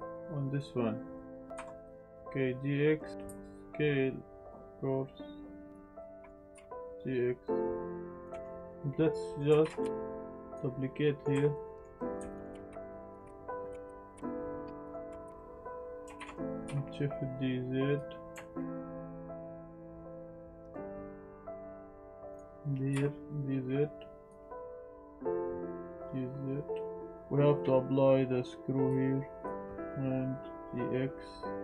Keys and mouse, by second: 1.1-1.5 middle drag, 1.5 Tab, 1.8 click, 2.1 a, 2.1 g, 2.1 x, 3.1 Tab, 3.2 s, 5.6 click, 6.0 click, 6.5 g, 6.5 x, 8.2 click, 8.4 shift+middle click, 9.2 middle drag, 9.6 shift+d, 9.8 z, 10.5 click, 11.0 middle click, 11.3 Tab, 11.5 middle click, 12.4 click, 12.4 click, 12.5-13.9 typing, 13.0 click, 13.0 middle click, 13.5 click, 13.8 click, 14.5 click, 14.9 z, 15.1 Tab, 15.2 click, 16.0 ctrl+z, 16.0 Tab, 16.0 x, 16.2 shift+d, 16.6 z, 17.9 click, 18.5 click, 18.6 shift+Tab, 18.7 shift+d, 18.8 z, 20.0 shift+d, 20.1 z, 20.8 click, 21.1 r, 21.2 x, 21.6 y, 22.1 click, 22.2 Tab, 22.3 click, 22.9 g, 24.2 click, 24.6 Tab, 24.6 z, 24.9 click, 25.3 z, 25.7 g, 27.1 Tab, 27.1 shift+d, 27.1 x, 27.1 h, 28.8-29.4 drag, 29.9 Tab, 30.6 Tab, 30.6 g.